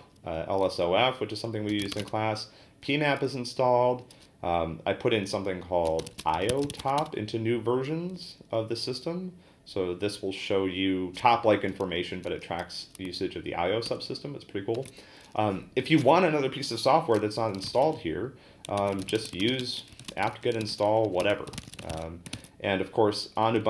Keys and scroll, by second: 1.4-2.4 typing, 5.6-7.2 typing, 13.9 ctrl+c, 14.7 ctrl+l, 17.3-22.4 typing.